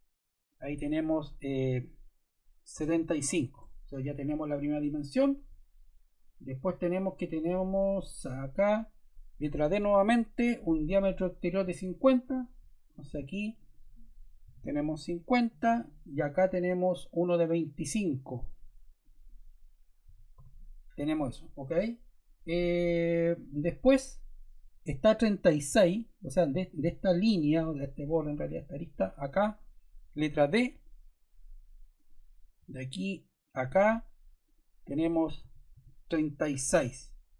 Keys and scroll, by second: 2.5-3.4 typing, 3.5 Return, 9.9 d, 14.1-15.0 typing, 15.1 Return, 19.8-20.8 typing, 30.4 d, 35.3 3, 35.7 6, 36.1 Return.